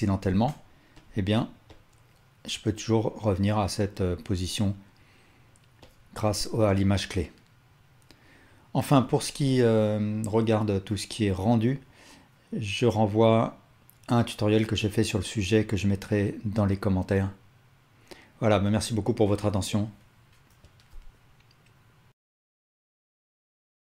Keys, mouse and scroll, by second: 0.3 g.